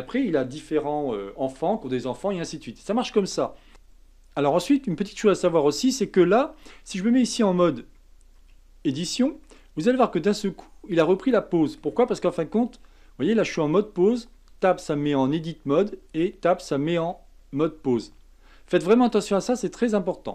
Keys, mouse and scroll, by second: 3.7 click, 4.6-7.6 middle drag, 8.4 Tab, 9.4-12.4 middle drag, 12.7 Tab, 14.3 Tab, 16.1 Tab, 17.1-19.4 middle drag, 19.4-19.9 scroll down 2, 19.9-20.3 middle drag.